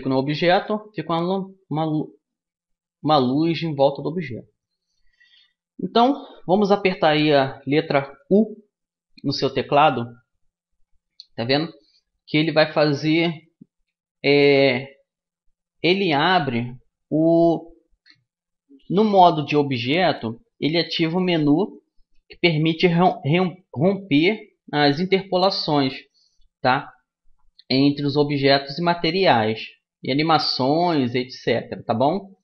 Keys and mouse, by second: 8.0 u.